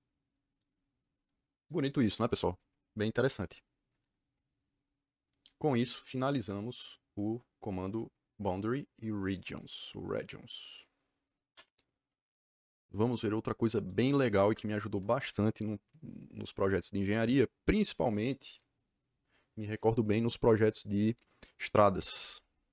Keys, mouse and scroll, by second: 9.5 click, 10.0 click, 11.5 right click, 14.0 Escape, 14.2 Escape, 14.4 Escape.